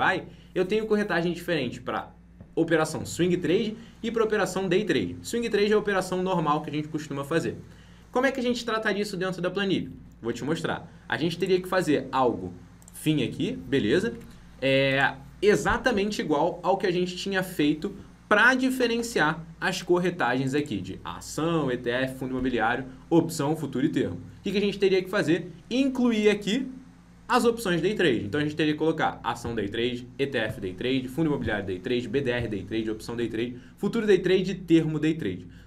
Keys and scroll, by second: 14.1 alt+Tab.